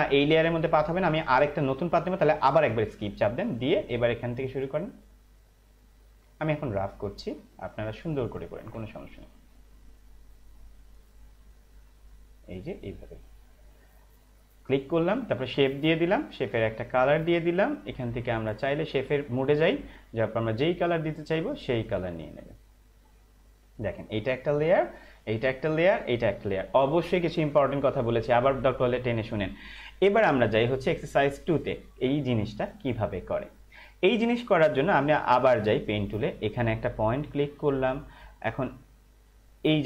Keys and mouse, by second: 2.6 Escape, 3.8 click, 18.9 click, 29.9 click, 35.8 click.